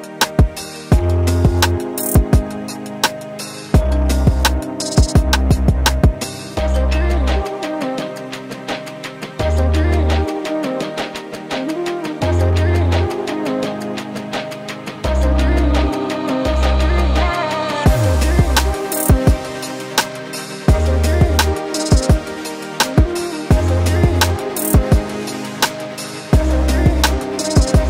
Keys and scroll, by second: 0.9 ctrl+shift+], 3.0 Return, 5.3 a, 17.2 t, 18.4 ctrl+Return, 21.0-21.9 typing, 24.0 shift+5, 24.7 ctrl+Return, 25.4 ctrl+t.